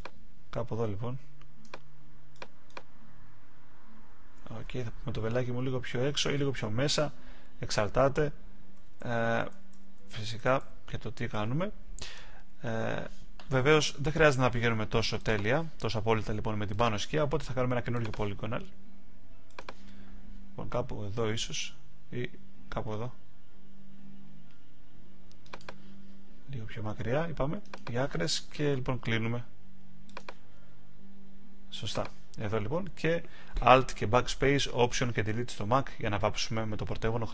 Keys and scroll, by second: 6.3 shift+Left, 8.7 Right.